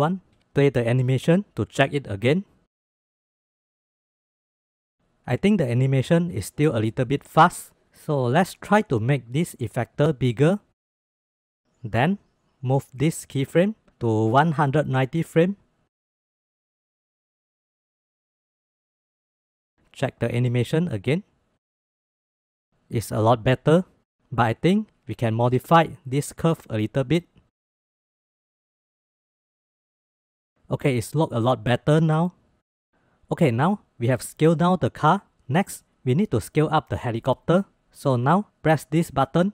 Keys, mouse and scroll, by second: 0.9-1.6 drag, 1.6-2.5 space, 2.5 click, 3.4 space, 4.7 space, 4.9 click, 5.6 space, 6.4 space, 9.3-11.1 drag, 12.1 click, 14.1-15.8 drag, 16.0 click, 16.6 space, 17.9 space, 19.4 shift+middle click, 20.4-20.8 drag, 20.8 space, 22.5 space, 25.6-27.2 drag, 28.0-29.1 drag, 29.1 space, 30.5 space, 32.6 click, 32.6 space.